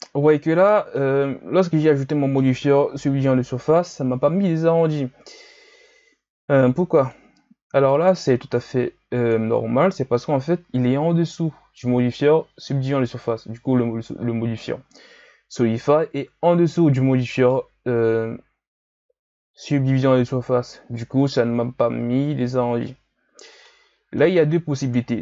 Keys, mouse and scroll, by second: 2.9 KP_1, 3.9-4.9 scroll up 1, 4.9-10.9 drag, 15.8-18.6 middle drag, 18.6-21.6 scroll down 2, 22.8-25.2 middle drag.